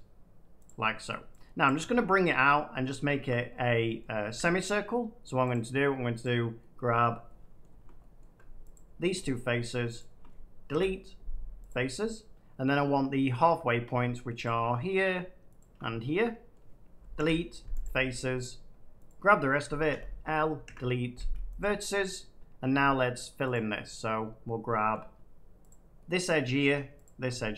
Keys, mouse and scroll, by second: 0.6 click, 2.0 shift+middle click, 2.7 middle click, 3.2 shift+middle click, 3.4-4.0 scroll, 4.2 Tab, 5.4 click, 6.1 click, 6.9 middle click, 7.5 shift+middle click, 8.1 middle click, 8.7 shift+click, 9.9 shift+click, 10.6 Delete, 11.6 click, 12.6 middle click, 13.8 middle click, 14.4 shift+click, 15.5 shift+click, 16.5 middle click, 17.1 Delete, 17.1 middle click, 17.7 click, 18.3 middle click, 19.0 click, 20.6 Delete, 21.5 click, 23.4 click, 24.0 middle click, 24.8 middle click, 25.6 click, 26.1 middle click, 27.0 shift+click.